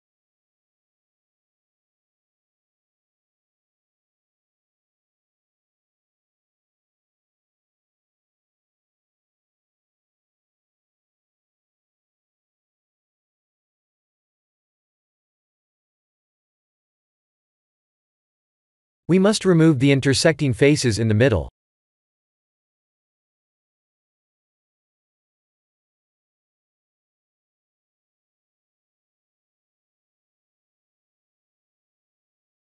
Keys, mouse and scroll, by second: 0.2 middle click, 0.7 middle click, 1.0 1, 1.5 KP_1, 1.9 KP_3, 2.4 shift+z, 3.3 click, 3.6 b, 5.3 b, 9.2 s, 11.8 Tab, 12.1 middle click, 12.8 shift+z, 13.2 middle click, 13.7 middle click, 13.8-15.2 middle click, 15.3 right click, 16.4 middle click, 22.3 click, 24.9 click, 25.8 Tab, 26.5 middle click, 27.7 3, 28.6 click, 29.6 shift+click, 30.5 shift+middle click, 31.7 shift+click, 32.5 x.